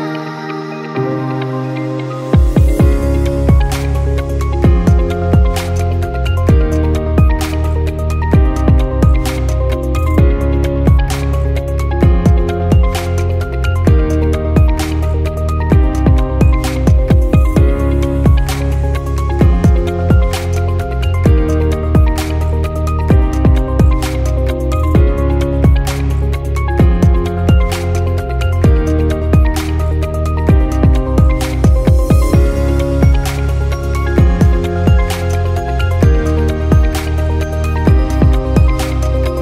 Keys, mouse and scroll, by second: 0.7-1.7 scroll down 5, 1.7 click, 2.5 shift+click, 3.2 shift+click, 3.5 shift+click, 4.2 h, 5.1-5.7 shift+middle drag, 5.7 click, 6.4 h, 7.1-7.4 shift+middle drag, 7.4-8.2 scroll up 4, 8.2-9.6 shift+middle drag, 9.6 click, 11.1 click, 11.8 KP_0, 14.6 click, 15.4 KP_0, 16.8-18.0 scroll down 5, 18.0-19.1 scroll down 5, 19.1-19.6 scroll down 4, 21.3-23.4 drag, 24.5-26.5 middle drag, 26.5-28.0 scroll down 1, 28.0-30.0 middle drag, 30.4-32.5 drag, 34.7-35.2 scroll down 2, 35.2-36.0 scroll up 2, 37.7-38.7 scroll up 5, 38.7-39.4 drag.